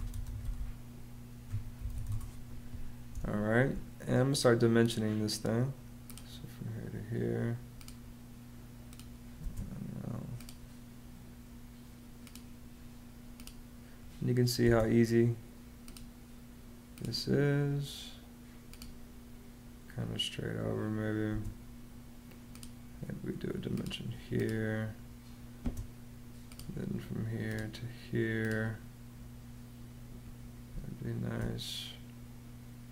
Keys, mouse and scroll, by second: 0.0-3.0 typing, 9.2 space, 14.4 space, 21.1 space, 25.4 space, 30.5 space.